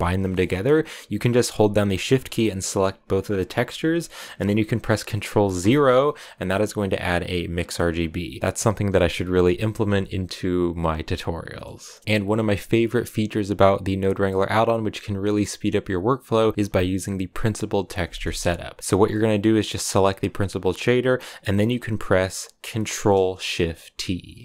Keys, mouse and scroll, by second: 0.0 ctrl+shift+click, 2.4-5.6 shift+drag, 5.6 ctrl+0, 7.1-24.4 drag.